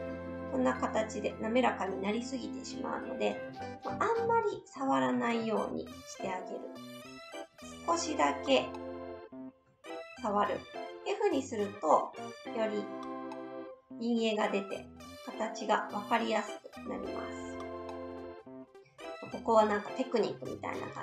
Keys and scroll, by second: 2.7 ctrl+z, 3.4 ctrl+z.